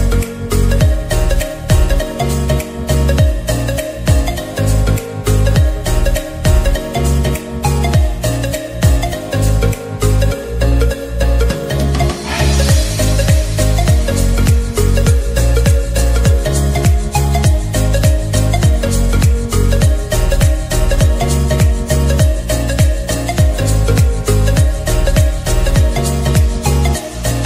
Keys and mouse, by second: 9.9 click, 14.0-20.3 drag, 20.3 ctrl+z, 24.7 click.